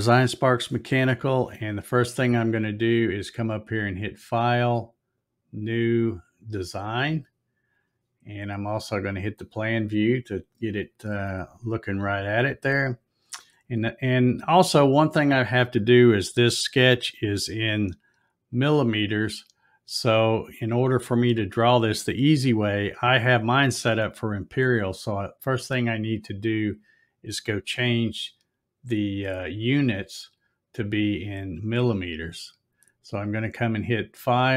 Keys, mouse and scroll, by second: 3.3 click, 5.2 click, 6.2 click, 8.9 click, 19.2 click, 30.1 click.